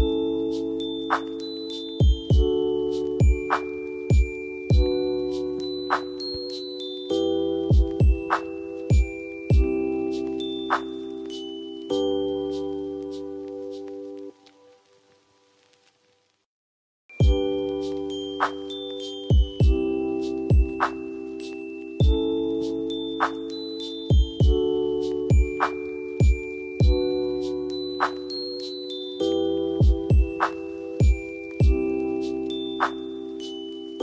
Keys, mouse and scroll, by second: 1.4 space, 2.2 shift+click, 3.0 t, 3.7 click, 3.7 click, 8.7 right click, 9.3 click, 12.7-17.0 drag, 17.1 space, 17.8 shift+click, 18.6 c, 19.3 click, 23.2 click, 25.7-26.4 ctrl+click, 31.7 F3, 32.3 F2, 32.7-33.6 drag.